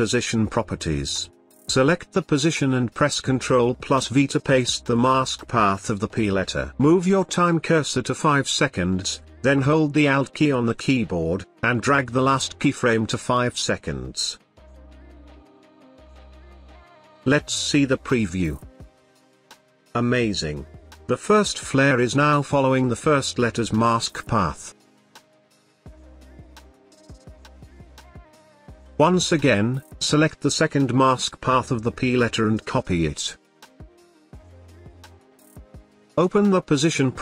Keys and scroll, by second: 3.4 ctrl+v, 32.7 ctrl+c, 36.5 p.